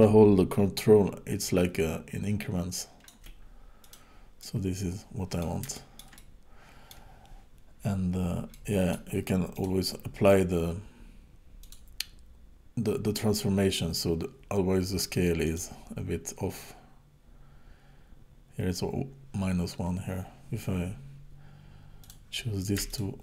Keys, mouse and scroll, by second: 3.8 click, 4.4 middle click, 5.7 shift+middle click, 6.1 middle click, 8.5 middle click, 9.5 click, 11.6 click, 15.5 click, 22.0 click, 22.9 shift+click.